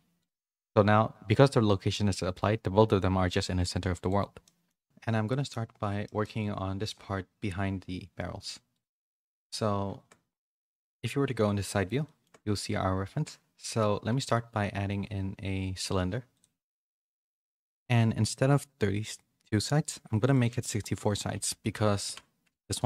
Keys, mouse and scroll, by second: 1.6 middle click, 4.4 middle click, 5.4 middle click, 6.0 middle click, 8.7 click, 10.8 KP_3, 12.0 middle click, 14.0 shift+a, 20.2-22.8 drag.